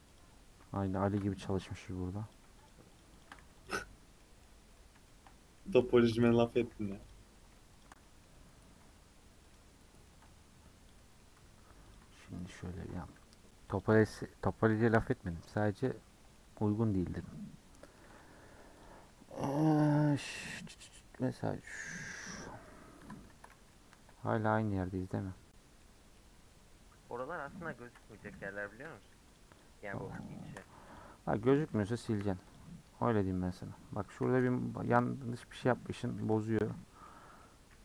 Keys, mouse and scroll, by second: 0.2 click, 0.9 shift+click, 1.6 x, 2.3 click, 2.7 shift+click, 3.0 shift+click, 3.2 shift+click, 3.7 x, 3.9 scroll down 1, 4.2-6.7 middle drag, 6.7 2, 7.1 alt+click, 7.8 alt+shift+click, 8.0 middle click, 9.5 alt+click, 10.0 middle click, 10.7 scroll up 1, 11.0 middle click, 11.9 alt+click, 12.8 a, 14.5 u, 15.3-16.6 middle drag, 16.6-18.8 scroll down 3, 18.8 click, 22.4-23.9 middle drag, 23.9 KP_Decimal, 24.4-26.0 middle drag, 26.0 scroll down 1, 26.1-28.1 middle drag, 28.1 click, 28.3 3, 28.6 click, 29.0 shift+click, 29.3 shift+click, 29.6 shift+click, 29.9 shift+click, 30.2 shift+click, 30.5 shift+click, 31.0 x, 31.5 middle click, 32.0 1, 32.5 click, 32.7-34.9 middle drag, 34.9 x, 35.6 middle click, 36.1 2, 36.3 click, 36.7 f, 37.4 middle click.